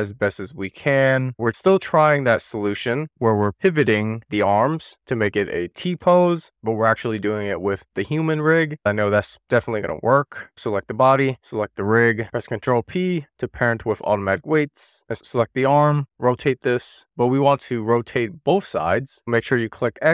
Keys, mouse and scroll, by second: 0.0 shift+click, 0.2 shift+click, 0.9 alt+shift+click, 1.0 shift+middle click, 1.2 alt+shift+click, 1.4 scroll up 1, 1.5 shift+click, 1.6-2.3 scroll down 2, 2.3 click, 2.8 middle click, 3.0 click, 3.3 middle click, 3.4 click, 4.1 click, 4.5 middle click, 4.8 click, 4.9 super+z, 5.7 click, 5.9 middle click, 6.2 scroll up 1, 6.4 click, 6.7 click, 7.0 middle click, 7.2 click, 7.3 middle click, 7.5 click, 8.0 middle click, 8.1 scroll up 1, 8.2 click, 8.7 middle click, 8.9 scroll down 1, 9.1 middle click, 9.5 click, 9.7 click, 9.9 shift+middle drag, 10.0-10.4 scroll up 1, 10.4 shift+click, 11.7 ctrl+p, 15.9 click, 19.5-20.0 scroll down 1.